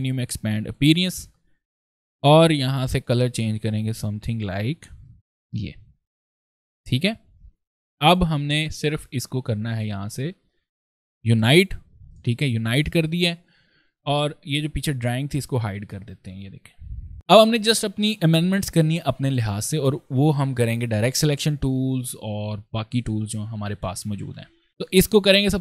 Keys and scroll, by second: 16.9 ctrl+space.